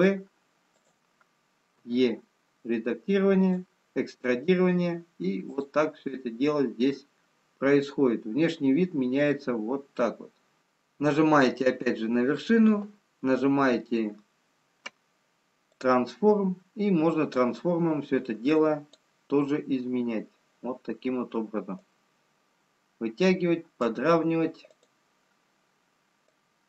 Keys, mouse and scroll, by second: 5.4 click, 6.7-7.4 scroll down 1, 10.4 e, 15.7 click, 21.7 click.